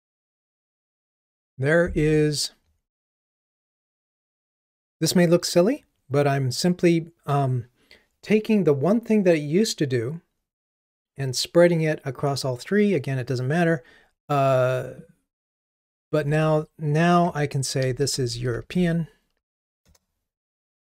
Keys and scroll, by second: 19.9 Return.